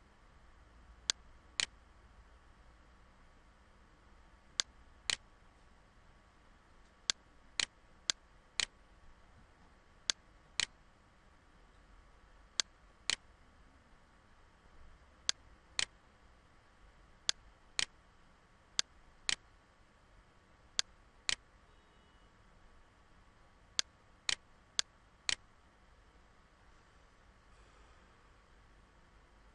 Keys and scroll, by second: 14.6 ctrl+z.